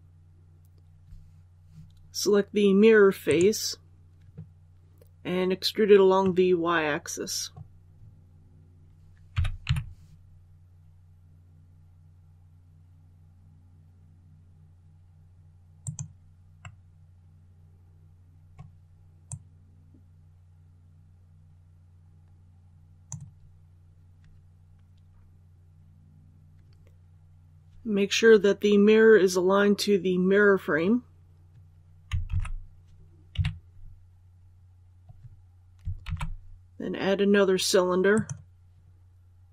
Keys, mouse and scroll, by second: 3.2 right click, 6.1-7.6 middle drag, 8.2 scroll up 1, 9.2-9.5 typing, 15.7 click, 16.5-18.6 middle drag, 19.1-23.6 drag, 25.4-25.7 scroll down 1, 32.2 alt+a, 33.2 KP_3, 34.0 scroll down 1, 35.9 shift+a, 38.0-39.5 drag.